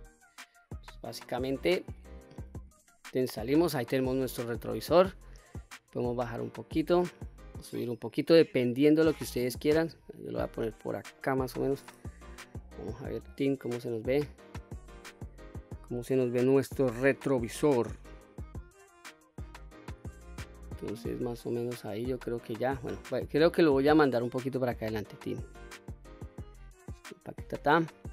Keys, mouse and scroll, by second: 2.5 Tab, 3.1-3.4 scroll down 1, 3.5-4.3 middle drag, 4.6-5.8 scroll up 2, 5.8-10.6 drag, 11.0-11.4 middle drag, 11.9 KP_1, 12.5-12.9 scroll down 1, 12.9 click, 20.7-22.5 middle drag, 23.5 click, 24.5 click, 26.5 click, 27.3-27.7 scroll down 2, 27.7-28.1 middle drag.